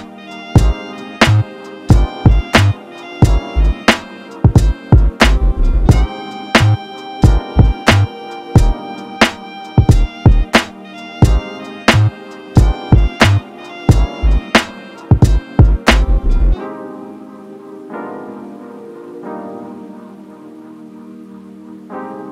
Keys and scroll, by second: 14.9 ctrl+t.